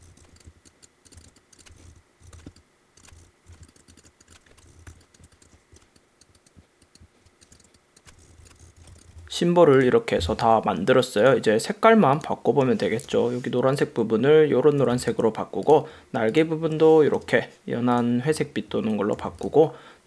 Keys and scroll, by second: 0.0 super+-, 0.2 super+=, 0.3 space, 1.2 super+space, 1.8 super+-, 2.2 super+=, 3.2 super+-, 3.5 super+=, 3.8 super+space, 4.7 super+-, 4.9 super+=, 5.2 space, 5.7 shift+m, 7.5 super+space, 8.2 super+-, 8.6 super+-, 8.8 super+=, 8.9 v, 9.0 space, 9.1 v, 13.2 i, 14.9 v, 17.3 i, 19.3 v.